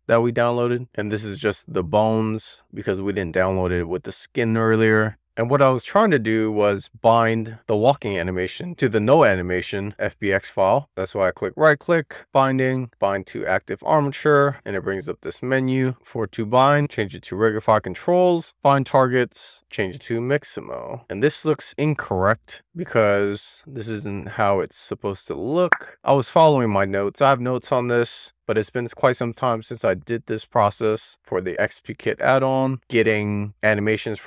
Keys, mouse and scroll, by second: 2.8 middle click, 7.1-7.9 drag, 10.7-17.5 right drag, 17.5-18.5 drag, 19.9-21.0 drag, 29.5 click, 31.5 click.